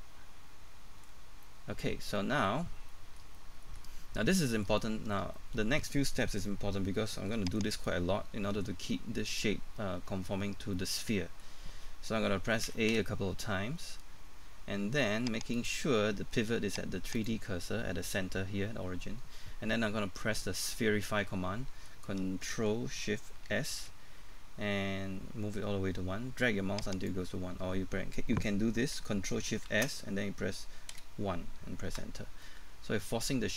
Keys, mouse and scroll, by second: 1.1-1.4 scroll down 1, 1.4 middle click, 2.6-2.9 scroll down 1, 2.9 middle click, 3.9 scroll up 1, 4.2 middle click, 6.5 middle click, 7.6 right click, 8.9 middle click, 10.4 scroll down 1, 10.7 middle click, 12.7 typing, 15.5 click, 20.2 middle click, 23.5 ctrl+shift+s, 26.9 click, 29.7 ctrl+shift+s, 30.9 1, 31.9 Return, 32.4 middle click.